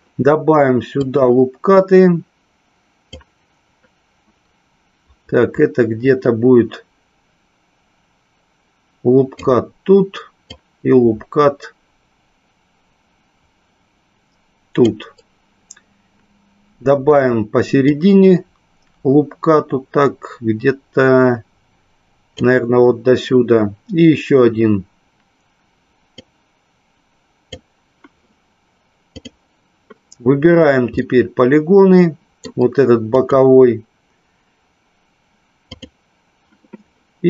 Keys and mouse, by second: 1.0 click, 3.1-9.4 drag, 10.4-14.8 drag, 17.9-22.4 drag, 26.1-27.4 drag, 29.3 click, 30.9-32.5 middle drag, 33.0 click.